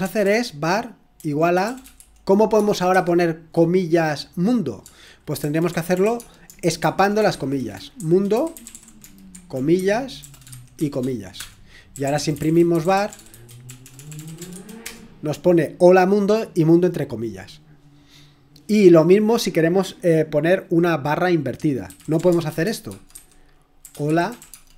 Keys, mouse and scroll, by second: 0.0-3.4 typing, 5.1-15.0 typing, 16.1-18.1 typing, 18.4-19.2 scroll down 2, 21.7-24.7 typing.